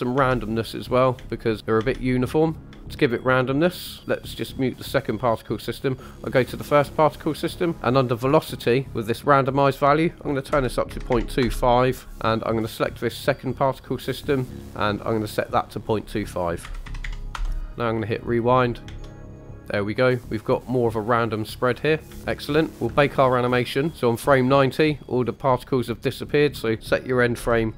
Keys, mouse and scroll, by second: 0.1-2.7 typing, 0.2 scroll up 1, 1.6 click, 4.8 click, 6.0 click, 7.6 click, 9.6-11.4 drag, 12.0 scroll up 2, 13.5 click, 14.2 click, 14.6-15.8 scroll down 3, 15.8-17.4 drag, 18.1 click, 18.7 middle click, 19.0 space, 22.1 space, 22.5 click, 22.7 scroll down 2, 23.0-23.3 shift+middle drag, 23.9 click, 23.9 space, 26.6-27.7 drag.